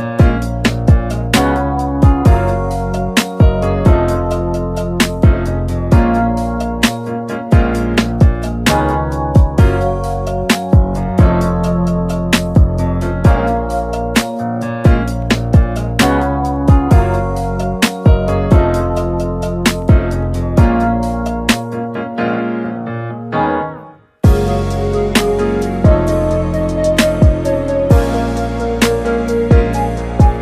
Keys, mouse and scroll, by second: 0.2-4.4 shift+middle drag, 4.4 g, 7.2 i, 10.8-12.6 drag, 12.6 g, 23.2-26.2 drag, 26.3-26.8 drag, 26.9-27.4 shift+middle drag, 27.4 scroll up 1, 27.9-30.1 drag, 30.1-30.4 shift+middle drag.